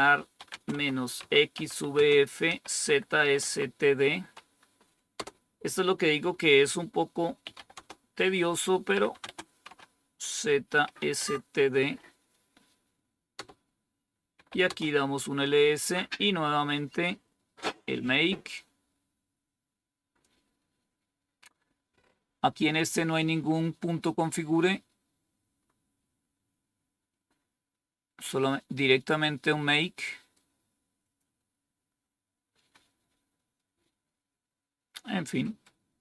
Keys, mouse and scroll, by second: 0.0-3.8 typing, 4.9-5.6 typing, 7.1-11.4 typing, 13.0-15.3 typing, 18.5-20.2 drag, 20.8 scroll up 1, 24.5 scroll up 1, 25.5-25.8 scroll up 3, 26.0 scroll down 2, 27.2-28.0 scroll up 2, 28.1 scroll up 2, 30.9 click, 32.6-33.4 scroll up 3.